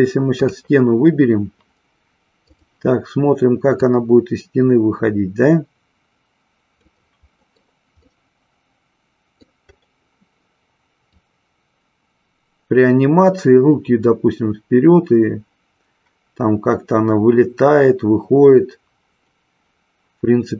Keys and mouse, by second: 0.4 click, 2.4 click, 3.8-6.9 drag, 7.5 middle click, 8.0-9.7 middle drag, 11.3-20.5 drag.